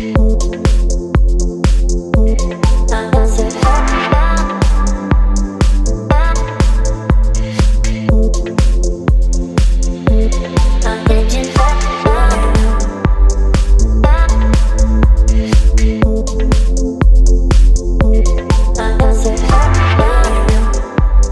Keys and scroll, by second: 0.0-2.4 typing, 5.9 typing, 11.2 typing, 18.0 space, 19.0 v.